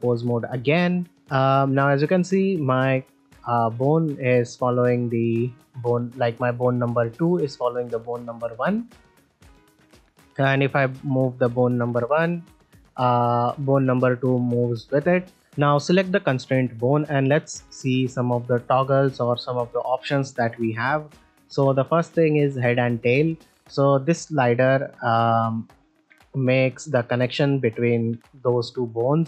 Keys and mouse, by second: 1.1 drag, 1.1-1.7 middle drag, 2.5 click, 4.4-5.4 drag, 5.4 middle click, 7.6 click, 8.6 click, 10.1 ctrl+middle drag, 10.5 middle click, 11.6 click, 12.5-12.9 drag, 12.9-13.3 middle drag, 23.8-25.4 drag, 25.9 ctrl+middle drag, 26.2 shift+middle drag, 26.7 ctrl+middle drag, 27.0 middle click.